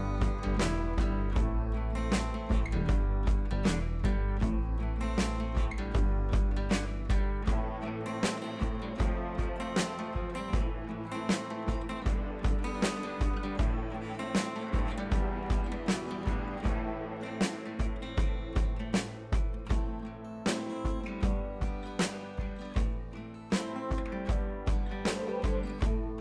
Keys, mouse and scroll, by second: 0.6-1.5 alt+click, 2.4-5.3 typing, 7.9-10.6 typing, 11.0 click, 11.4 scroll up 1, 12.0-12.7 click, 14.2 scroll down 1, 15.1 click, 15.4 scroll down 1, 15.6-16.0 scroll up 1, 16.0 click, 16.2 Left, 16.7 Right, 17.1 scroll down 1, 18.0 click, 18.1 Up, 18.8 click, 19.0-19.5 scroll down 1, 19.5-20.4 scroll up 1, 20.5 click, 20.7-21.7 scroll down 1, 21.7-22.2 click, 22.4 ctrl+c, 22.6 click, 23.2 t, 23.4 click, 24.0 ctrl+v, 24.8 click.